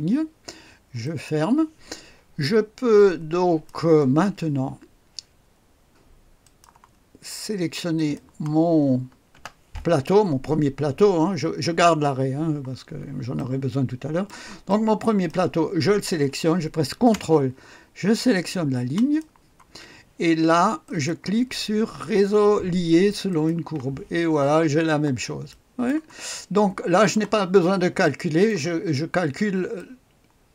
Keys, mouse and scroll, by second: 1.0 click, 2.4-4.2 drag, 6.4 click, 7.0-8.0 scroll down 1, 8.0 click, 9.3 space, 13.3-16.0 drag, 19.0 ctrl+click, 20.8 click, 23.3 click, 24.8-25.5 scroll up 1, 25.5 right click, 25.7 scroll up 1, 26.4 middle click, 27.2 click, 28.0 right click, 28.9-29.8 scroll down 1, 29.8 click.